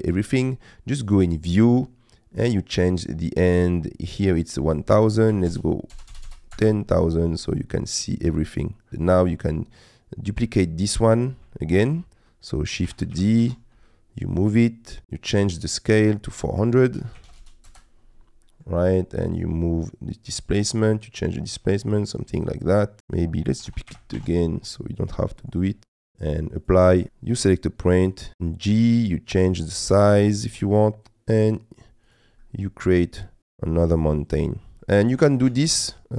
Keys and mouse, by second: 1.4 click, 3.6-6.6 drag, 6.1 KP_0, 6.2 KP_0, 7.8-8.9 middle drag, 9.1 click, 10.6 middle click, 11.6 shift+middle click, 13.0 shift+d, 13.1 g, 13.5 shift+z, 15.0 click, 16.2-17.7 drag, 17.4 KP_0, 18.4 middle click, 19.4-23.0 drag, 23.7 shift+d, 23.9 g, 24.1 shift+z, 26.1 click, 27.1 Escape, 27.1 g, 30.5 z, 32.4 middle click, 33.4 g, 35.2 middle click, 35.6 Tab, 35.9-36.1 middle drag.